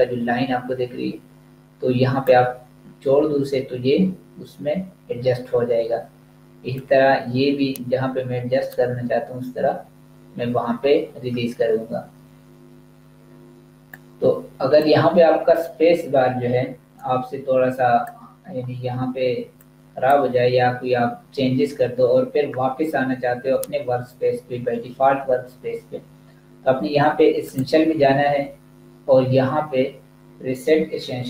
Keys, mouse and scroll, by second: 6.8 click, 13.3 click, 27.5 click.